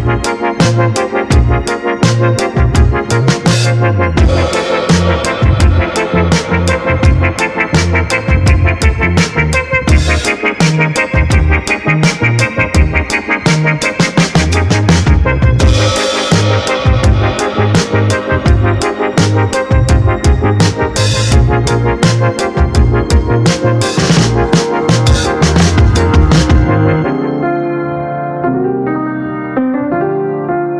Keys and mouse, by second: 2.6 middle click, 3.9-5.1 drag, 7.6-8.4 drag, 10.3-11.2 drag, 12.2 click, 13.1-14.6 drag, 14.8 ctrl+shift+click, 16.4-17.4 drag, 18.2-20.1 drag, 22.2-23.0 drag, 24.4-26.4 drag, 26.9 ctrl+shift+click, 29.9-30.7 drag.